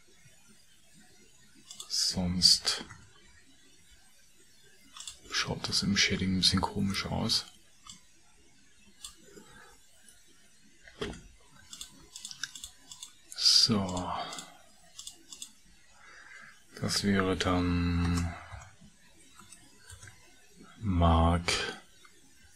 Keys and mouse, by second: 12.0 shift+2, 12.2 shift+click, 12.6 shift+click, 12.9 shift+click, 13.8 shift+click, 14.3 shift+click, 15.0 shift+click, 15.4 shift+click, 18.0 space.